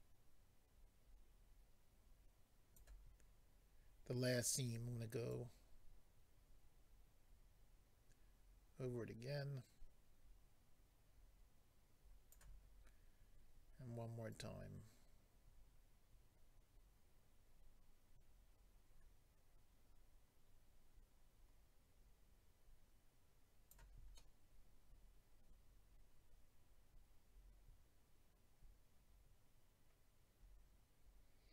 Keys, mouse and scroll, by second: 5.3 click, 14.3 click, 24.2 middle click.